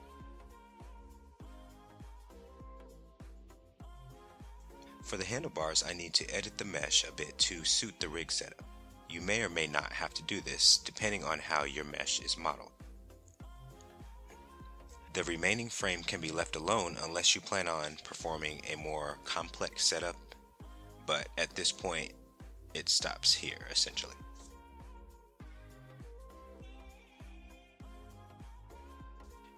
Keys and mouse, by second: 2.5 click, 3.8 Tab, 6.0 l, 7.3 p, 9.1 Tab, 11.3-13.1 middle drag, 15.2 click, 17.9 shift+click, 21.0 ctrl+j, 23.7 KP_1, 25.0 click.